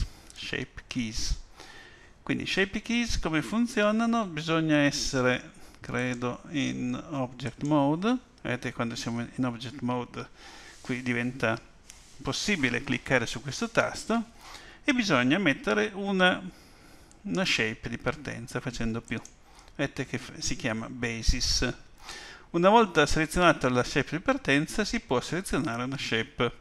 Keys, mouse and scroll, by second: 6.0 click, 19.0 click.